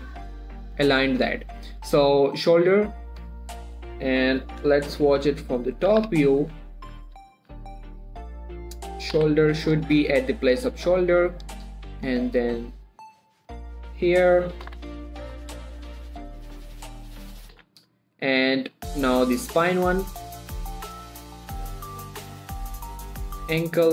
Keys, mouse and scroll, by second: 0.8-1.4 scroll down 1, 2.6 click, 4.6 7, 6.4 z, 6.8 scroll up 1, 7.5 shift+middle click, 7.8 g, 8.7 click, 10.9 scroll down 1, 11.3 shift+middle click, 11.9 click, 15.8 scroll up 1, 16.2 g, 17.2 click, 19.2 scroll down 1, 19.6 shift+middle click, 20.1 click.